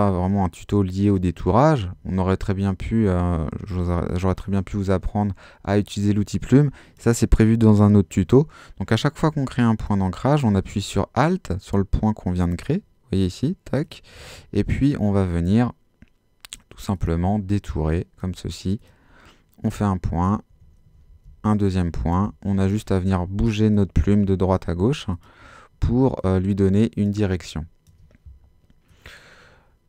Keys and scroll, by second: 21.1 alt+super+z, 21.7 super+z, 27.3 space.